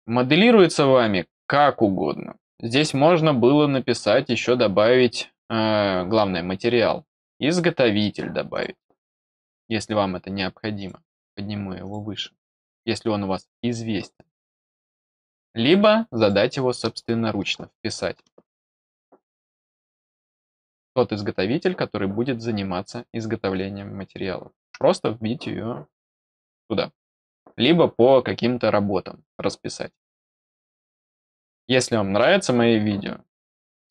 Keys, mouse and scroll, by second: 3.0-4.0 scroll down 4, 7.4 click, 8.4 click, 10.7 click, 11.7 click, 13.9 click, 15.2 click, 16.1 click, 19.2 click.